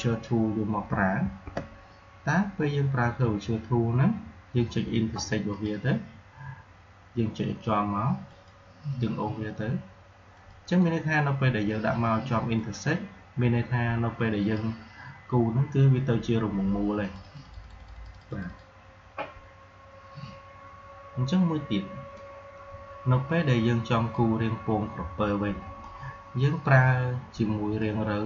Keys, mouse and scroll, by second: 0.8 shift+Num_Lock, 1.1 shift+', 5.4 click, 8.2 click, 16.9 click, 22.0-28.2 drag.